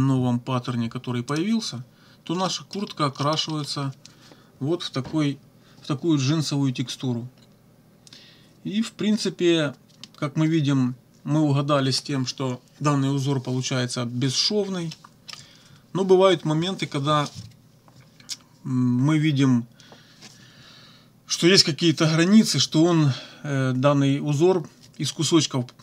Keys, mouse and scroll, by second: 1.3 click, 2.5 middle click, 3.2 click, 14.9 click.